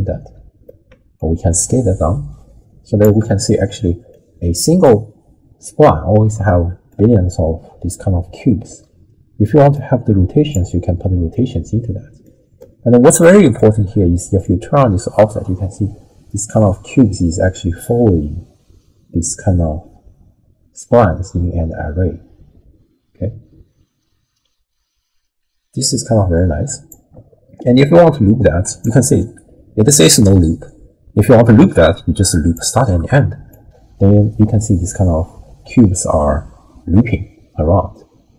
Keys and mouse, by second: 1.2-3.0 shift+drag, 4.1-5.0 middle drag, 6.5 middle click, 9.8-10.5 drag, 11.5-12.3 middle drag, 13.2 click, 14.4-26.9 shift+drag, 28.6-32.7 drag, 33.5-38.3 shift+drag.